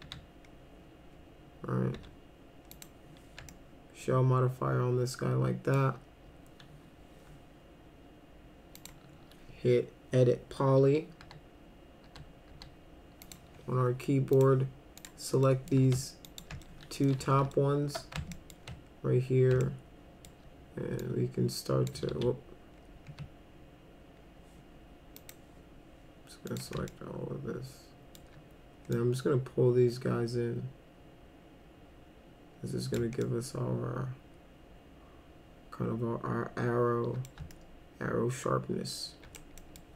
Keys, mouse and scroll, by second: 0.0 s, 2.0 s, 2.7 click, 3.5-5.7 alt+middle drag, 8.8 click, 11.2 e, 12.1 e, 12.5 e, 13.3 click, 14.3 click, 15.0 click, 15.5 middle click, 16.3 ctrl+click, 16.6 alt+middle click, 17.2 w, 17.5 alt+middle click, 18.3 alt+middle click, 19.6 alt+middle click, 21.0 click, 22.1 ctrl+z, 25.2 ctrl+click, 26.5 ctrl+click, 26.9-28.2 alt+middle drag, 28.9-32.9 drag, 33.2-37.3 alt+middle drag, 37.5-39.4 alt+middle drag, 39.6 middle click.